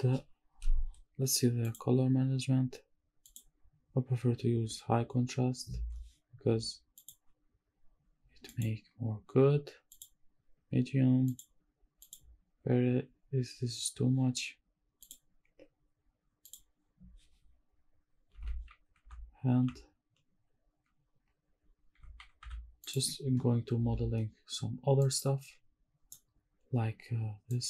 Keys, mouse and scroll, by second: 1.7 click, 2.0 scroll down 2, 3.2-7.2 drag, 8.5-10.1 drag, 11.2-12.2 drag, 15.0-16.5 drag, 17.4 scroll down 1, 18.1 scroll up 1, 18.4 shift+`, 19.7 d, 22.1 w, 22.5 s, 22.8 click.